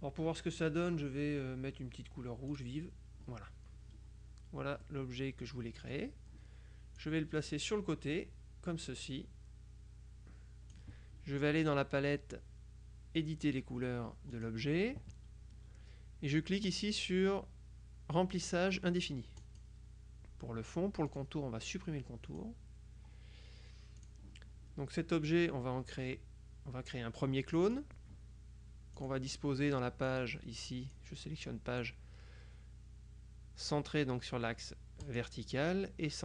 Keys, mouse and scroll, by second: 2.6 click, 4.9-5.8 scroll up 1, 5.8-6.5 scroll up 1, 5.8 click, 7.0-11.3 drag, 14.4 click, 19.5 click, 21.2 click, 22.3 click, 24.1 click, 27.6 click, 29.0 click, 30.2 click, 31.0 click, 35.1 click.